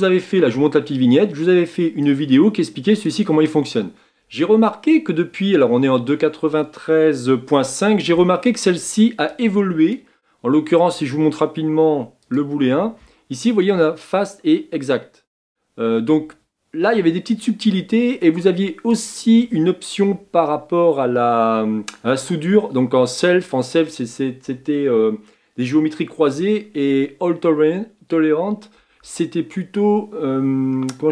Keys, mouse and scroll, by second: 2.0-5.4 drag, 9.3-11.0 drag, 12.3-14.1 drag, 18.9-26.7 drag.